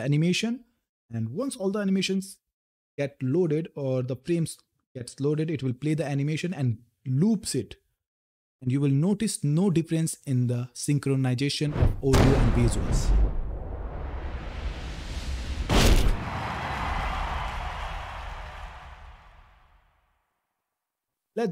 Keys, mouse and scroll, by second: 13.6-20.9 typing.